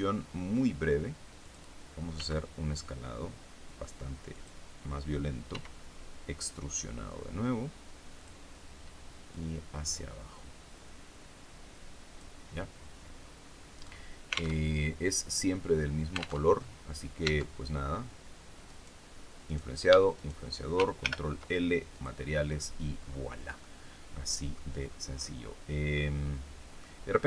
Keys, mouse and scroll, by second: 1.3 click, 2.1 s, 4.3 click, 5.4 e, 8.1 click, 9.2-12.3 drag, 13.1-13.7 scroll down 1, 13.7-14.1 scroll down 1, 14.5 alt+Tab, 16.3 alt+Tab, 17.1 Tab, 18.6 right click, 19.4 right click, 20.1 shift+right click, 20.9 ctrl+shift+l, 21.9 click, 22.9-23.5 scroll down 1, 23.5-24.7 middle drag, 24.8 scroll down 1, 25.1-25.4 scroll up 1, 25.9-26.9 middle drag, 27.0-27.2 scroll up 2.